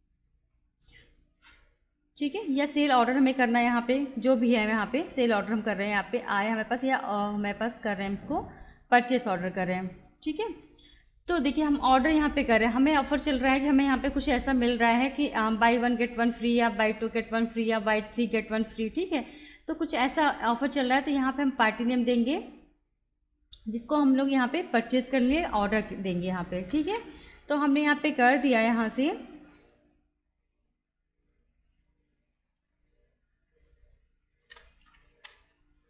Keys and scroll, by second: 9.8 alt+F4, 24.6 alt+c, 34.1-35.8 typing.